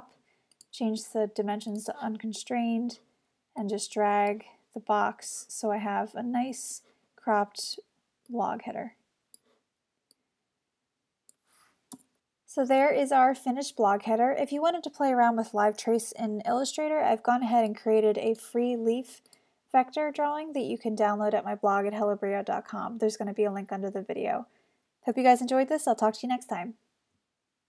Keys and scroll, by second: 12.0 Return, 12.6 super+Return.